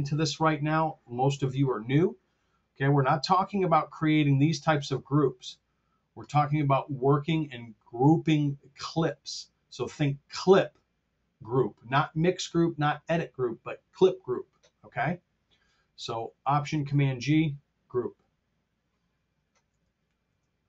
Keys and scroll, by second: 19.6 super+Tab.